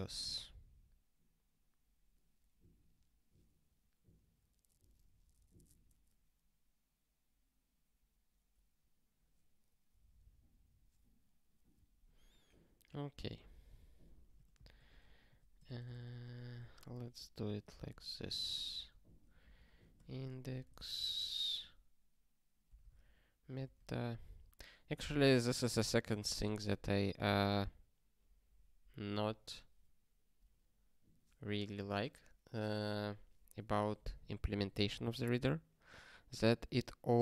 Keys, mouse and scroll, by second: 12.8 ctrl+p, 13.5 alt+b, 14.1-17.0 typing, 17.2 ctrl+n, 17.5 ctrl+a, 17.9 ctrl+alt+k, 18.4 ctrl+k, 18.6 ctrl+p, 18.9 ctrl+e, 19.4 alt+b, 19.6 alt+b, 20.0-23.4 typing, 23.6 alt+shift+s, 26.7 ctrl+s, 27.4 ctrl+n, 34.6 ctrl+n, 35.3 ctrl+p.